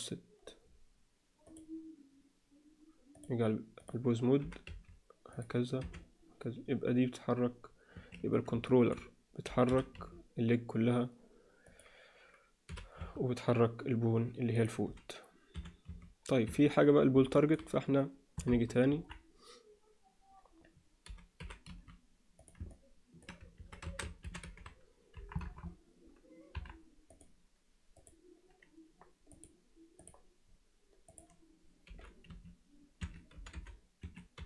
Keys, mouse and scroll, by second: 1.6-3.2 drag, 3.8 click, 4.4 g, 5.8 r, 8.6 alt+shift+middle drag, 9.6 g, 12.6 g, 15.5 r, 17.3 shift+middle click, 18.5 KP_3, 18.9 KP_1, 21.3 g, 22.7-23.2 alt+middle drag, 23.8 a, 24.2 alt+r, 24.4 alt+g, 25.1 KP_1, 25.5 KP_3, 26.5 KP_1, 27.0 click, 29.4-30.0 drag, 31.0 click, 31.9 g, 33.3 g, 34.3 g.